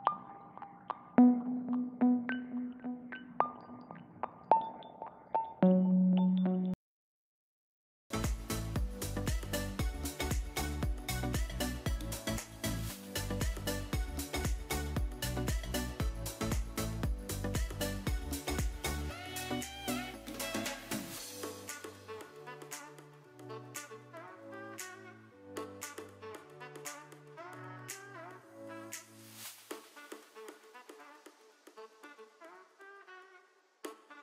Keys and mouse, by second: 0.6 Return, 2.0 r, 3.3 g, 4.4 click, 4.9 r, 5.0 r, 6.1 click, 7.0 click, 7.6 click, 8.7 ctrl+space, 9.4-10.2 middle drag, 10.4 drag, 11.0-11.5 shift+middle drag, 12.7 click, 14.2 shift+d, 15.3 g, 15.5 z, 16.7 click, 17.1 middle click, 18.0 KP_3, 18.9 s, 19.4 click, 19.6 g, 20.1 click, 20.4 r, 21.4 s, 21.9 click, 22.0 g, 23.9 click, 24.3-25.0 middle drag, 25.2 Tab, 25.7 middle click, 28.2 g, 28.3 z, 30.2 ctrl+KP_Subtract, 31.3 g, 31.4 z, 32.6 click, 33.6 ctrl+KP_Add.